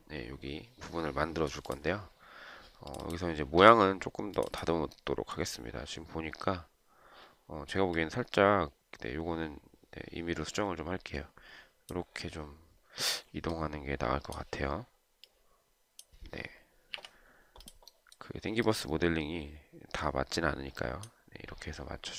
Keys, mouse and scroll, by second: 17.3 Delete.